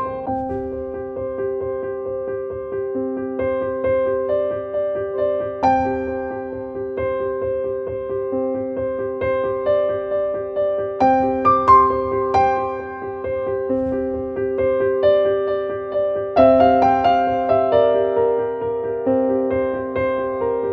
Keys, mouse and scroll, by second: 9.3-20.7 drag.